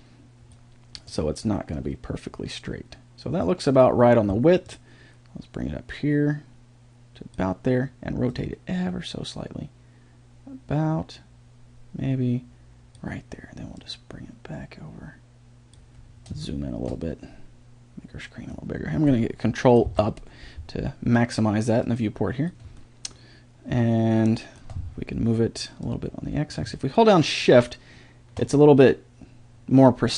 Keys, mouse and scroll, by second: 2.9-5.2 drag, 13.8 click, 16.4-18.0 middle drag, 19.9 ctrl+Up, 22.8-23.4 middle drag, 23.4-23.8 drag, 23.5 middle click, 23.8-24.5 middle drag, 24.5 drag, 25.8-27.7 drag.